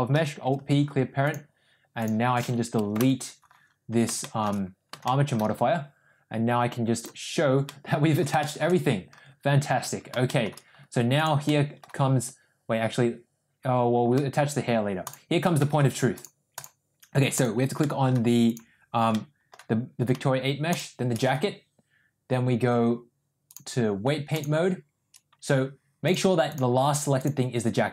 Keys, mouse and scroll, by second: 0.2 alt+p, 3.2 Delete, 4.3 shift+middle click, 5.1 shift+middle click, 7.0 click, 7.7-8.2 middle drag, 8.4 shift+middle drag, 10.3 shift+middle click, 11.2 click, 11.5 middle click, 15.1 shift+click, 15.6 middle click, 16.6 click, 17.4 click, 17.9 middle drag, 19.2 middle click, 23.6-24.5 drag, 26.1-26.7 drag.